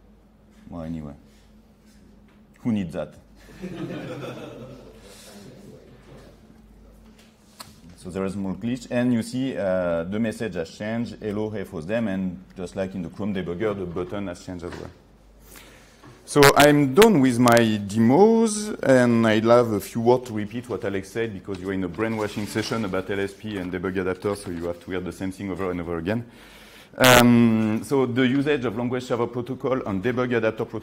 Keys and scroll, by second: 6.7 F8.